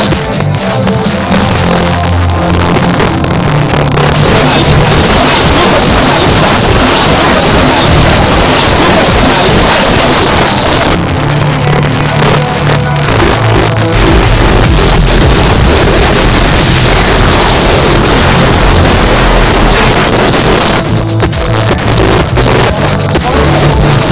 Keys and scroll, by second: 10.1 Page_Down, 19.9 Page_Down.